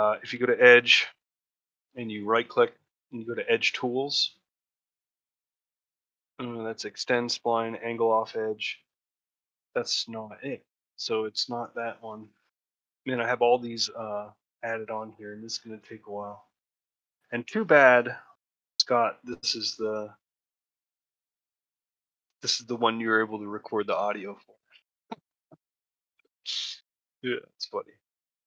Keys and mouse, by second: 0.4 click, 0.9 middle click.